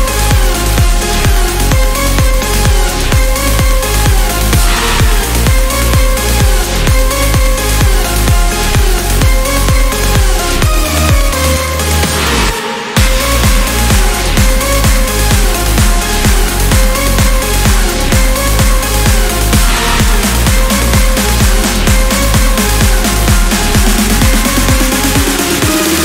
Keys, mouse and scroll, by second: 0.6 click, 2.3 8, 3.0 click, 3.9 1, 4.4 click, 4.9 1, 7.4 click, 9.3 click, 10.4 1, 10.9 0, 14.0 click, 15.5 click, 16.3 click, 17.0-17.6 scroll down 2, 18.1 scroll up 2, 18.6 scroll up 2, 19.2-19.8 scroll down 2, 20.2 scroll up 2, 21.3 0, 22.0 scroll down 1, 23.4 click, 24.3 click.